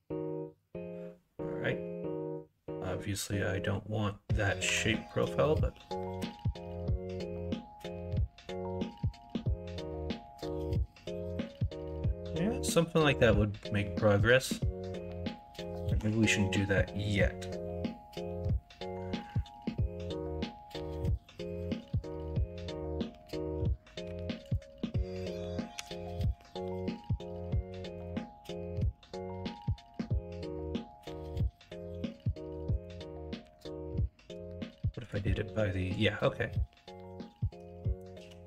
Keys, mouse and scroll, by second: 15.8 ctrl+z, 24.0 1, 25.7 g, 26.6 ctrl+z, 27.6 2, 28.7 g, 31.2 ctrl+z, 32.0 1, 33.4 2, 35.0 ,, 36.4-38.0 drag, 38.1 ctrl+z.